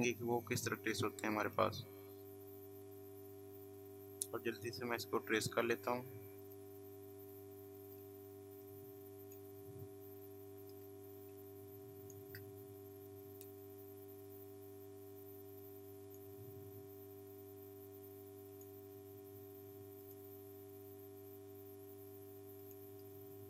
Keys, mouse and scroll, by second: 4.9 click, 16.0 click, 18.5 click, 22.6 click.